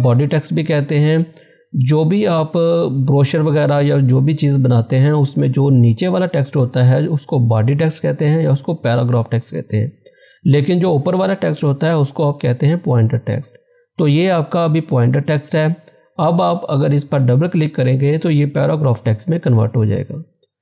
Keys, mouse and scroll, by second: 13.6 scroll down 1, 17.4 scroll down 1, 17.5 click.